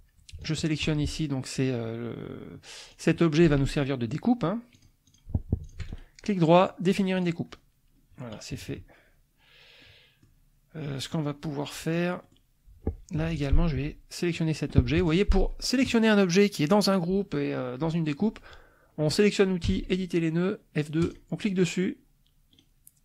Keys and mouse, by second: 0.4 shift+click, 2.9 click, 3.5 ctrl+z, 4.8 click, 5.0 click, 5.6 shift+click, 6.9 click, 8.5 KP_Subtract, 9.8 click, 11.1 click, 11.6 click, 12.2 click, 13.1 F2, 13.3 click, 15.0 F1, 15.0 click, 15.8 click, 19.7 F2, 21.0 click, 22.5 right click.